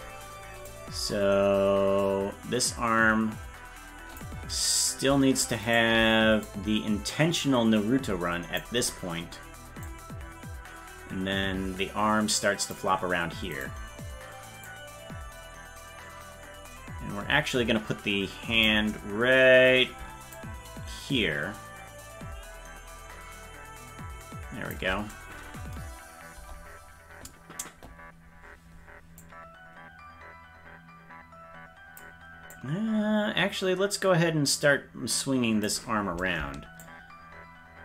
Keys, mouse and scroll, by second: 0.7-4.2 drag, 5.7 shift+right click, 6.4-8.6 drag, 9.9-12.7 drag, 13.6-14.7 right drag, 14.7-18.7 drag, 20.3-24.7 shift+drag, 26.3 KP_0, 29.2-32.0 drag, 32.6-35.7 drag, 36.8-37.8 shift+drag.